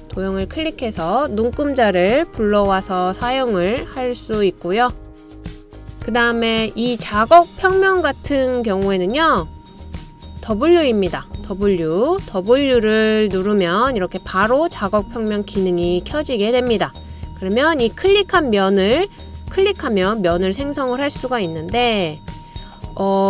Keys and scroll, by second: 3.3 typing, 9.2-9.9 typing, 21.9 typing.